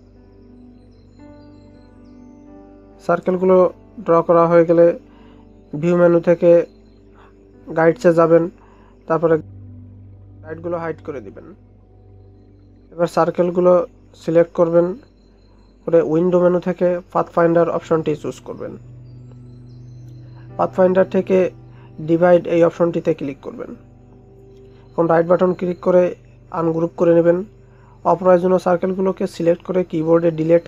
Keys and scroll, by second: 0.0 ctrl+c, 0.3 ctrl+f, 2.1 ctrl+c, 2.4 ctrl+f, 4.1 ctrl+c, 4.4 ctrl+f, 5.8 ctrl+0.